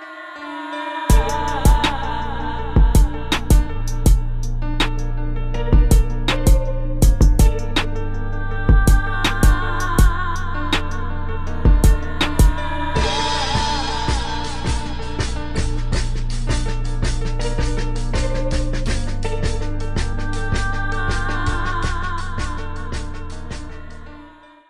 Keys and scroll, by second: 0.6 space.